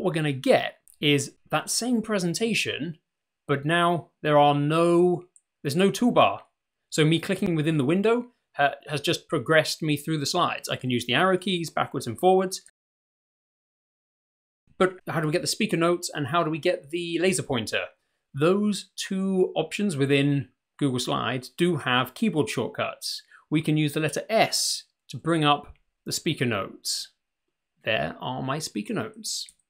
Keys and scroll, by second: 10.1 Left, 11.3 Right, 12.2 Left, 13.1 Right, 25.1 s, 29.5 Left.